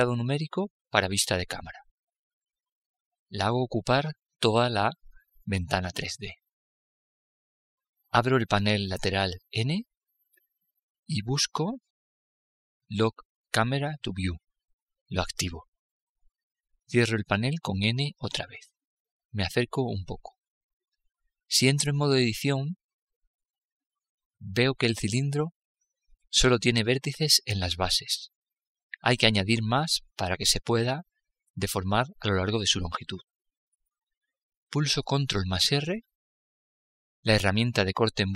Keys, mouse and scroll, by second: 3.3-6.0 middle drag, 9.0 n, 10.1-11.8 drag, 14.6-16.3 drag, 17.3 n, 19.0-19.4 scroll up 1, 19.4 middle click, 20.0-21.1 scroll down 1, 21.1-22.9 middle drag, 22.9 Tab, 26.8 a, 27.9 a, 29.2 a, 34.8 ctrl+r.